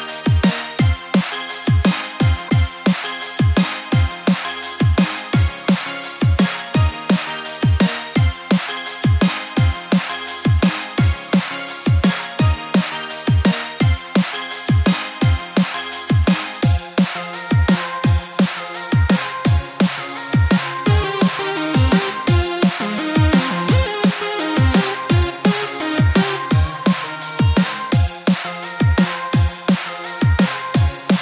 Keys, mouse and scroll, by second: 4.7 s, 5.0 o, 5.5 s, 6.9-7.4 scroll up 2, 7.4 g, 7.8 o, 8.1 click, 8.6 shift+click, 8.8 h, 9.1 alt+click, 9.4 c, 10.4-10.7 scroll down 3, 10.7 c, 11.8 shift+z, 12.0 x, 12.9-13.7 scroll down 14, 13.7 middle click, 14.5 shift+middle click, 14.8-15.2 scroll up 3, 15.1 middle click, 15.2 KP_1, 15.5 shift+middle click, 15.9 scroll up 3, 16.1 shift+middle click, 16.5 shift+middle click, 16.5 scroll up 2, 16.7 shift+middle click, 17.2 shift+click, 17.6 shift+click, 18.0 shift+click, 18.4 shift+click, 18.7 shift+middle click, 19.3 shift+click, 19.6 scroll down 1, 19.6 shift+middle click, 20.1 shift+click, 20.5 shift+click, 20.7 shift+click, 21.0 shift+middle click, 21.8 shift+click, 22.0 shift+middle click, 22.5 shift+click, 22.8 shift+middle click, 23.5 shift+click, 23.9 shift+click, 24.2 shift+click, 24.4 shift+click, 24.6 shift+middle click, 25.1 shift+click, 25.4 shift+click, 25.8 shift+middle click, 26.6 shift+click, 27.3 shift+click, 27.8 scroll down 2, 28.1 shift+middle click, 28.6 shift+click, 29.0 shift+click, 29.4 shift+click, 29.7 shift+click, 30.2-31.1 scroll down 6.